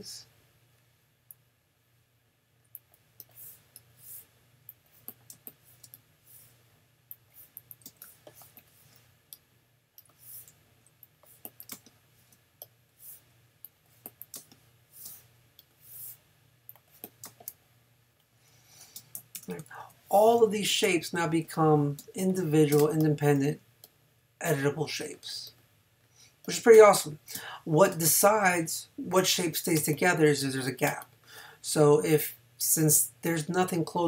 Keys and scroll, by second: 5.3 space, 7.9 space, 11.7 space, 14.4 space, 17.3 space, 22.0 space, 26.7 space, 27.9 space, 29.8 space, 30.9 space.